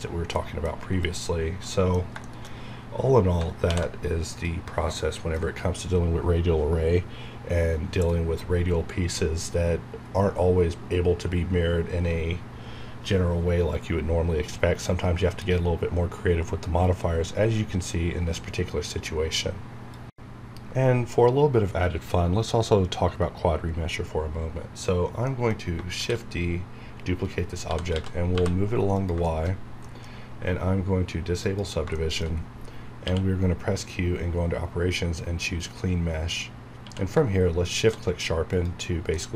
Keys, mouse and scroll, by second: 1.0 ctrl+click, 1.7 ctrl+middle click, 3.6 v, 4.3 ctrl+click, 4.9 ctrl+middle click, 5.5 ctrl+scroll up 1, 25.6 scroll down 1, 25.9 shift+d, 27.2 right click, 27.4-28.8 typing, 28.9 click, 29.2 shift+middle click, 29.5 scroll up 1, 29.8 middle click, 31.4 click, 31.9 shift+middle click, 32.5 scroll up 1, 33.0 q, 35.5 click, 36.1 scroll down 1, 36.6 scroll up 1, 36.8 q, 37.7 shift+click, 38.9 scroll down 1, 39.1-39.3 middle drag.